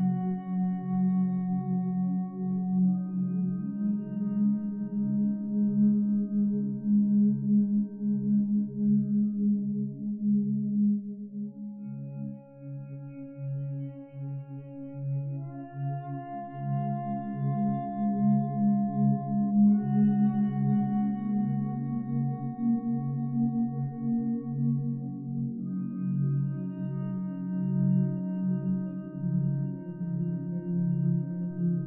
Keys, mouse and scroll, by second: 2.2 1, 2.4 0, 2.5 Return, 7.6 Escape, 13.0 Escape, 20.7 Escape, 29.0 1, 29.2 8, 29.4 Return.